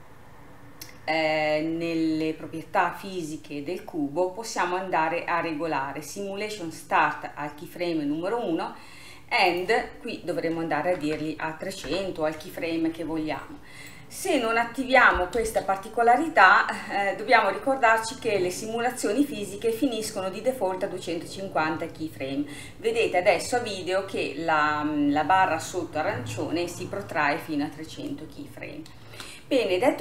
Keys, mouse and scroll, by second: 3.2-6.4 scroll down 3, 9.6-11.2 drag, 11.2 KP_0, 13.6-14.2 scroll down 2, 14.2-14.9 scroll up 4, 14.9-15.4 scroll down 1, 15.4 space, 22.6-24.4 scroll down 2, 24.4-25.8 scroll down 1, 25.8 scroll down 1, 29.1 space.